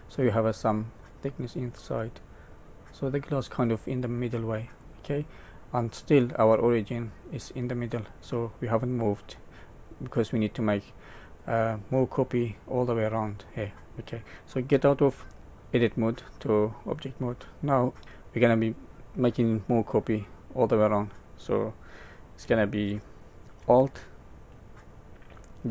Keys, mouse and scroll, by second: 0.4 middle click, 1.6 middle click, 5.0-5.5 scroll down 2, 5.5 middle click, 6.7 middle click, 9.8 middle click, 11.3 middle click, 13.3 middle click, 14.7 Tab, 15.4 middle click, 16.1 middle click, 16.9 middle click.